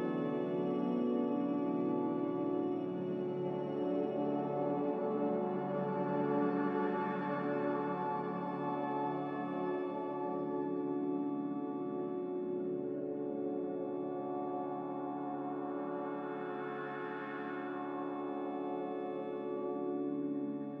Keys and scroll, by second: 1.8 z, 3.4 5, 3.7 Return, 3.7 0, 7.1-7.9 typing, 11.5 n, 17.4 a.